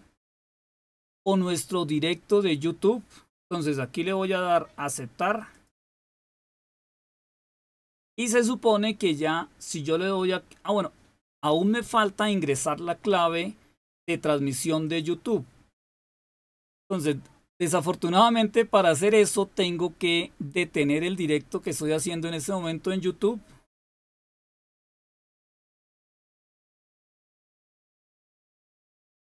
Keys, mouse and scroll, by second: 5.4 click, 7.1 click, 14.8 click, 24.3 click, 26.5-29.1 scroll down 2, 29.1 click.